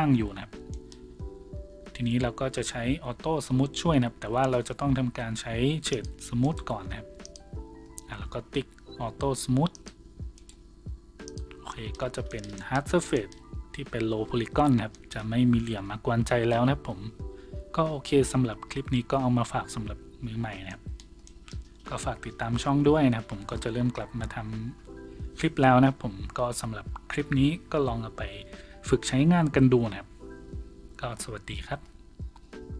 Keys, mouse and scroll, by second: 3.0 w, 6.4 right click, 6.4 w, 8.7 w, 9.7 click, 10.4 right click, 12.0 a.